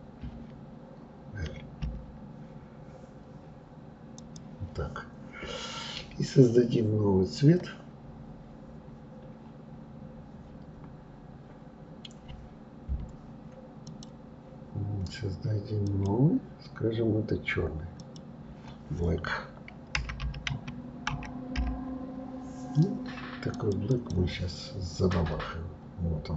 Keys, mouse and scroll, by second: 1.8 l, 4.2 click, 11.0-11.4 scroll up 3, 11.4-12.9 scroll down 3, 13.8 click, 15.8 click, 18.0-21.0 drag, 23.9 click.